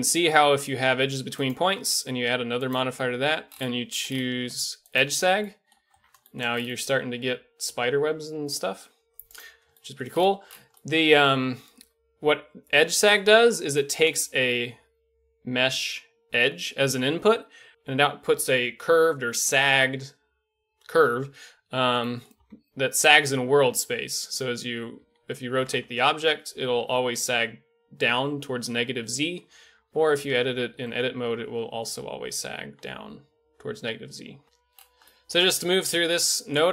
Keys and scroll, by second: 5.9 a, 22.4 r, 25.6 r, 29.7 Tab, 29.8 Tab, 30.8 r, 34.4 a.